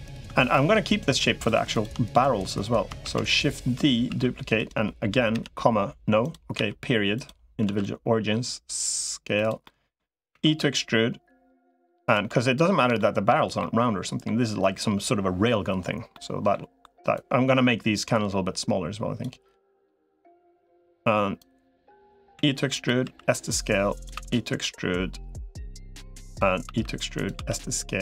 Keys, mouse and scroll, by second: 0.2 shift+click, 2.8 shift+d, 4.0 s, 5.2 ,, 6.4 ., 7.6 s, 9.4 middle click, 10.2 e, 12.1 middle click, 12.8 middle click, 13.4 middle click, 15.9 middle click, 17.0-19.0 drag, 20.0 middle click, 21.2 click, 22.2 e, 23.0 s, 24.0 e, 26.6 e, 27.2 s.